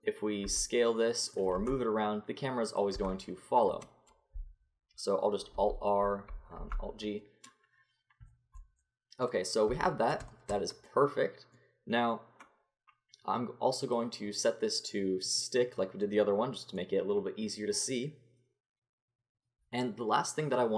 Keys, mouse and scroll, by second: 0.4 s, 1.5 r, 2.9 s, 5.6 alt+r, 6.6 alt+g, 9.7 Tab, 13.8-17.0 drag.